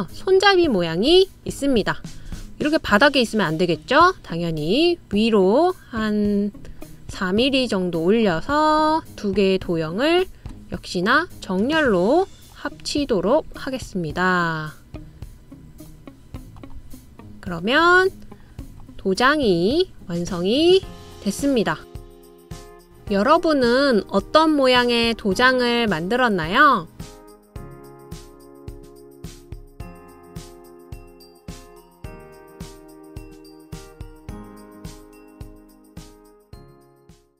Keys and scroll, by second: 22.6 super+天.